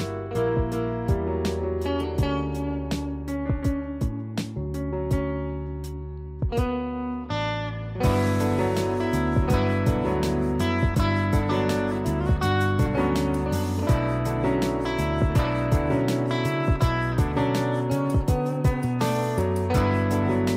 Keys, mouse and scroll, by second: 0.6 click, 2.7 click, 7.8 click, 10.7 click.